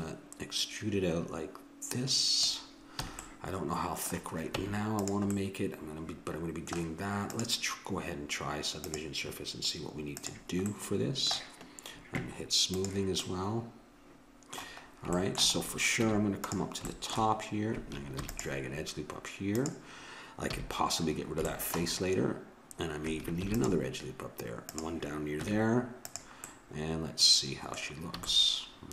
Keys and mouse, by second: 3.0 a, 3.2 click, 4.6 Tab, 7.3-9.1 drag, 10.2-12.1 drag, 12.7-14.6 drag, 13.2-16.0 middle drag, 16.0 Tab, 18.2 ctrl+r, 20.4 a, 23.4 ctrl+r, 25.4 Tab, 28.2 a.